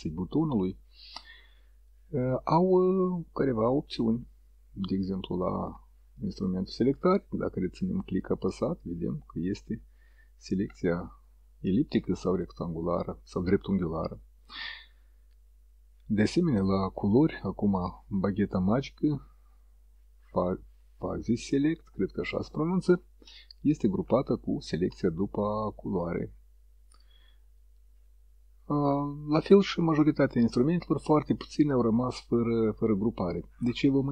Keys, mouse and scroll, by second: 6.3 click, 16.8 click.